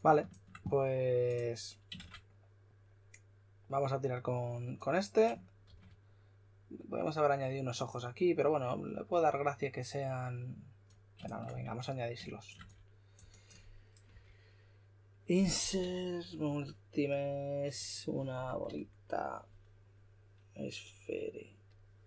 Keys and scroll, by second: 1.9 shift+r, 5.6 shift+r, 14.1 b, 15.5-16.3 typing, 18.6 typing.